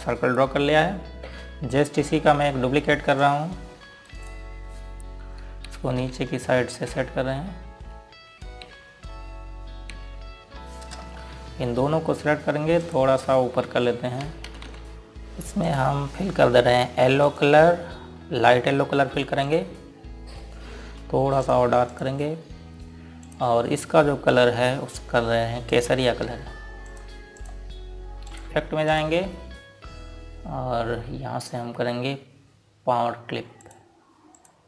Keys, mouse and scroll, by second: 0.7 ctrl+space, 2.1 scroll up 1, 4.5 click, 5.1 right click, 6.8 Down, 9.7 Down, 11.0 Left, 13.9 shift+click, 15.1 click, 26.8 click, 28.9 ctrl+g, 30.0 click.